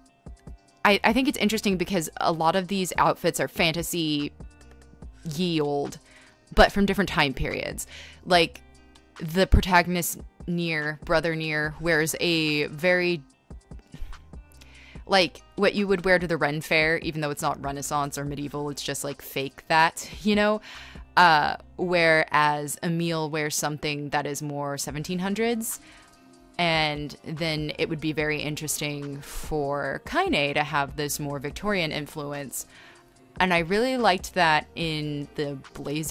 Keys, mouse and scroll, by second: 0.6 ctrl+z, 2.0 ctrl+z, 2.4 space, 2.6 ctrl+z, 3.9 space, 5.5 ctrl+z, 6.2 e, 8.2 space, 9.3-10.2 typing, 11.1 ctrl+z, 11.7 e, 12.1 b, 14.5 ctrl+z, 15.1-16.4 typing, 19.3 space, 20.6-25.4 typing, 26.8 e, 27.2 b, 27.4 ctrl+z, 28.7 r, 30.0-31.6 typing, 32.7 r, 34.6 e, 35.1 b.